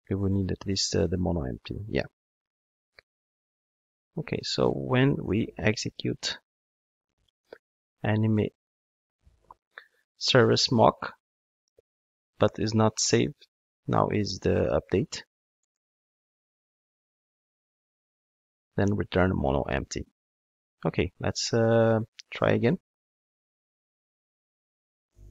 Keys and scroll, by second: 6.3 super+/, 9.9 Return, 15.7 Return, 23.1 ctrl+shift+d.